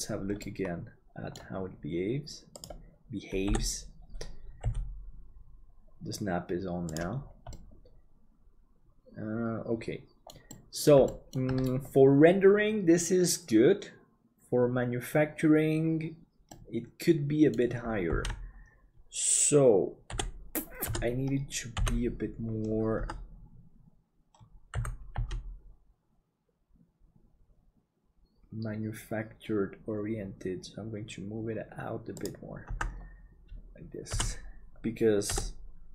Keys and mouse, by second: 0.4-1.9 middle drag, 3.5 KP_7, 4.6 g, 7.6-10.3 middle drag, 10.5 middle click, 11.1 shift+middle click, 16.6-17.6 middle drag, 18.5 ctrl+z, 20.1 KP_7, 20.9 KP_Divide, 23.0 Tab, 24.7 g, 32.7 Tab, 34.1 KP_Divide.